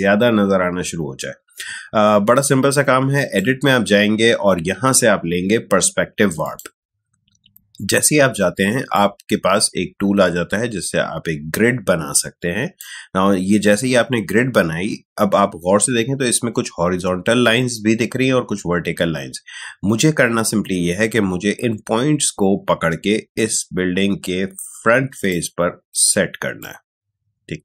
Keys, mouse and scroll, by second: 3.1 click, 6.4 click, 8.9-15.3 drag, 20.2-27.6 drag.